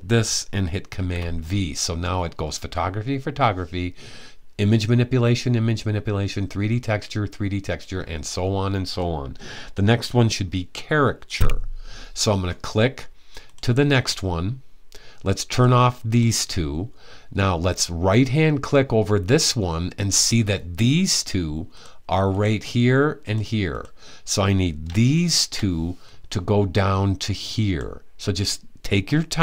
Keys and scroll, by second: 0.6 super+v.